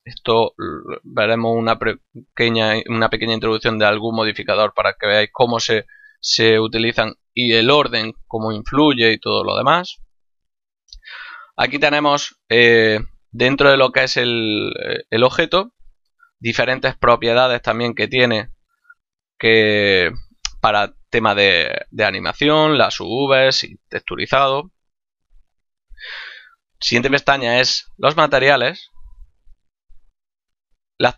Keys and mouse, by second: 0.5 click, 4.7 click, 10.4 click, 26.0 click, 30.2 click.